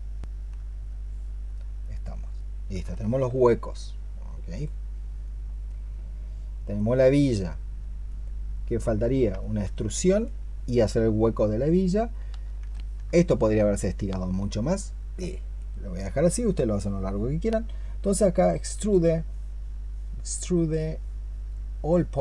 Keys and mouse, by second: 8.4 double click, 9.2 alt+click, 12.6 alt+click, 18.6-22.2 space.